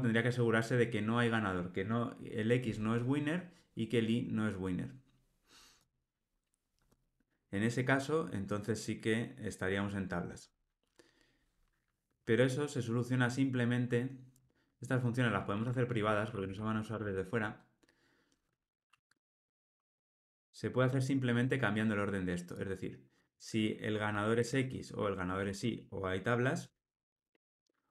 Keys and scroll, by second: 16.9 Return, 23.3 super+x, 23.8 Delete.